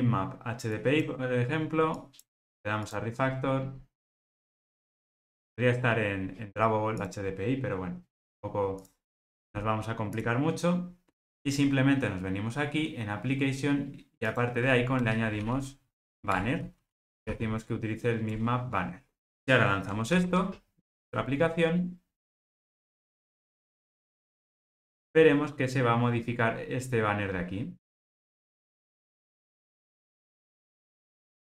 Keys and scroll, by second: 16.5 Return, 20.2 ctrl+r.